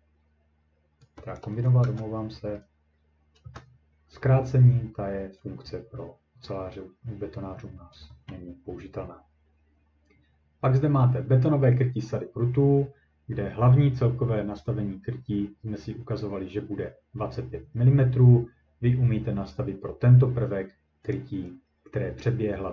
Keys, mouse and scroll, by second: 1.4 click, 1.4 scroll up 2, 1.8 0, 3.4 Return, 10.2-14.7 scroll, 21.1 click.